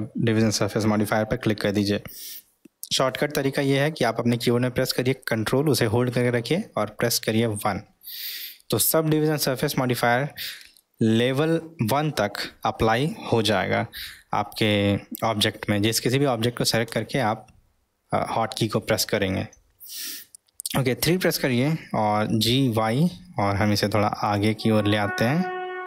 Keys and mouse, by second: 9.7-10.9 ctrl+middle drag, 22.2 g, 25.0-25.8 middle drag.